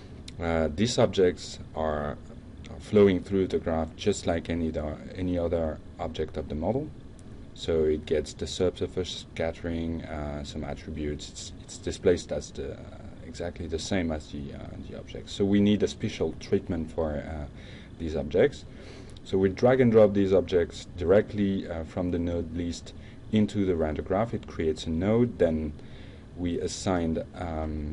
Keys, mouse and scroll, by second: 1.2 click, 1.8-2.6 drag, 3.5-4.7 drag, 15.4-16.7 drag, 17.2-18.0 drag, 18.1 drag, 19.0 drag, 19.5 drag, 20.0 click, 20.8 click, 21.3 click, 23.4 ctrl+space.